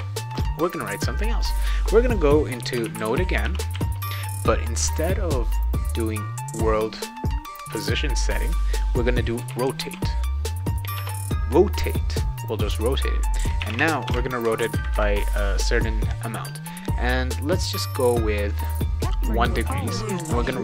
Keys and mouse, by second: 0.8-1.4 drag, 2.5-4.2 typing, 9.1-10.4 typing, 11.0 Return, 13.3-14.6 typing, 17.2-17.8 drag.